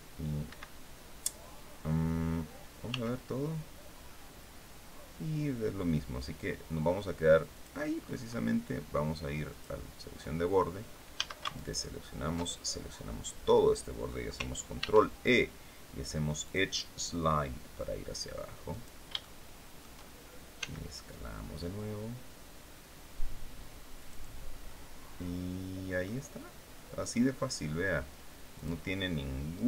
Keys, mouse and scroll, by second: 0.1 Escape, 2.5 s, 7.2 click, 7.6-8.0 scroll up 1, 9.2 click, 10.8 a, 11.2 alt+shift+right click, 12.1-13.9 alt+shift+middle drag, 14.4 ctrl+e, 16.1 click, 18.4 click, 18.9 shift+middle click, 20.2 s, 23.6 click, 24.3-25.9 middle drag, 28.2 click, 29.2 right click.